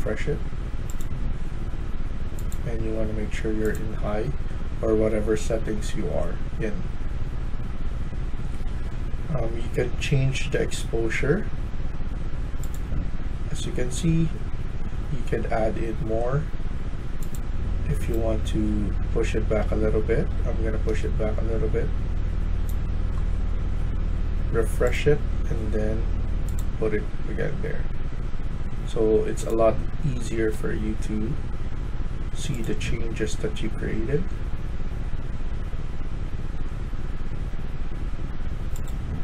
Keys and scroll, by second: 18.4 s, 19.0 s, 20.2 w.